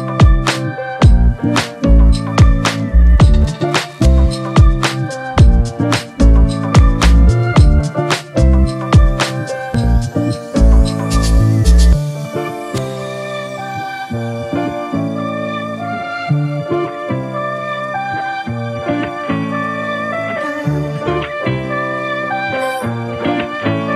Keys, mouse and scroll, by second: 8.8 double click.